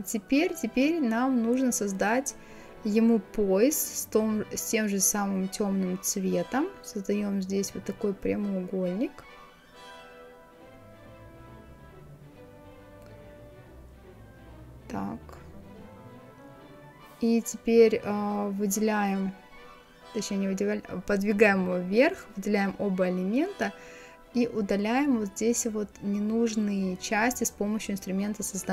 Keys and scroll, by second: 18.3 Up.